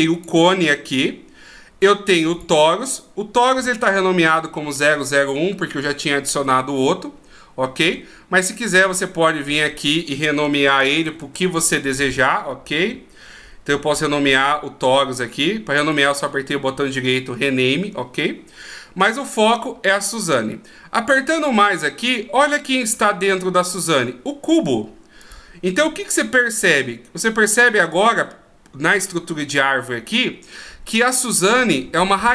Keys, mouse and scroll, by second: 0.5 click, 2.7 click, 8.1 right click, 16.1 right click, 19.3 click, 21.7 click, 25.5 click.